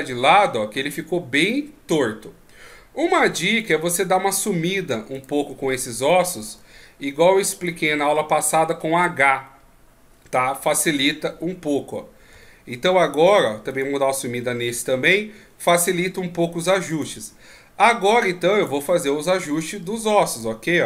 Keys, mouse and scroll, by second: 0.1 KP_3, 1.5 middle click, 2.7 scroll down 2, 3.6 right click, 5.1 shift+right click, 6.4 right click, 6.8 scroll down 2, 7.9 h, 8.4-8.9 scroll up 3, 8.9 scroll down 1, 9.0 middle click, 11.3 KP_1, 12.4 KP_3, 13.7 right click, 14.7 h, 16.9 right click, 17.8 click, 19.9 ctrl+z, 20.3 right click.